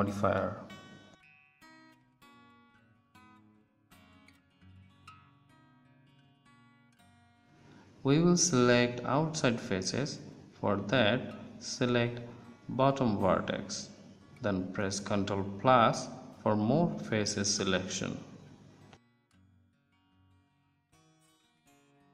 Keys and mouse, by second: 0.3 Tab, 0.6 click, 3.2 a, 4.0 z, 4.9 click, 11.2-13.0 middle drag, 13.0 z, 17.0-18.3 middle drag, 18.3 ctrl+KP_Add.